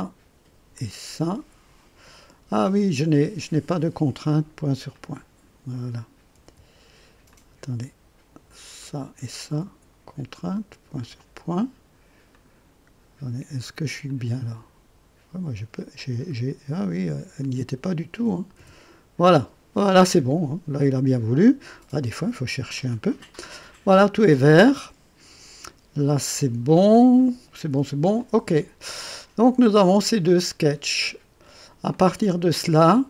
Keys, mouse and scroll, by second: 0.7 click, 2.1 right click, 3.5 click, 4.9 click, 6.4 c, 7.3 click, 8.8 click, 9.4 c, 11.0 click, 12.3 click, 14.0-14.9 drag, 15.9 click, 17.4 click, 18.5 c, 22.2 scroll up 2, 28.1 click, 29.1-31.7 drag, 31.9-33.0 drag.